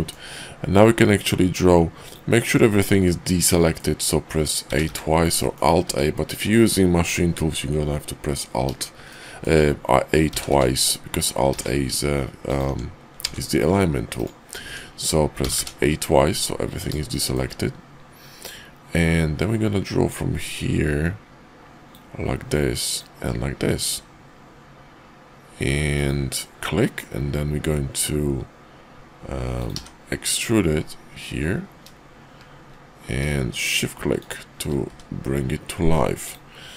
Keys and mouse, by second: 3.0-3.8 middle drag, 4.6 a, 4.9 a, 5.3 middle click, 5.9 `, 9.0-9.4 shift+middle drag, 10.3 a, 10.5 a, 11.4 alt+a, 12.7 Tab, 13.2 alt+a, 14.6 Tab, 15.4 a, 15.6 a, 17.1 shift+click, 19.9 click, 26.4-29.7 middle drag, 36.2 click.